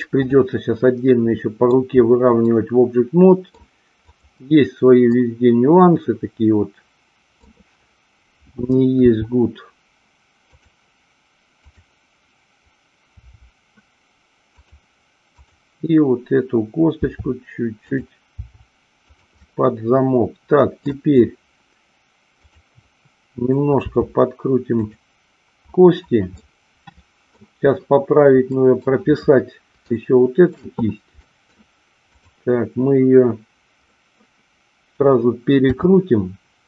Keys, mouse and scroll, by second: 2.6-3.6 middle drag, 4.0-5.4 drag, 5.4-7.4 middle drag, 9.0 r, 10.4 click, 13.2 r, 14.6 click, 16.9 r, 17.9 click, 19.0 click, 19.3-20.8 middle drag, 22.4-23.7 drag, 23.8 r, 24.8 click, 26.3-27.3 middle drag, 28.4 middle click, 29.9 shift+middle click, 31.2 middle click, 31.4-32.0 scroll down 1, 32.0-33.4 drag, 33.8-34.9 middle drag, 35.7 r.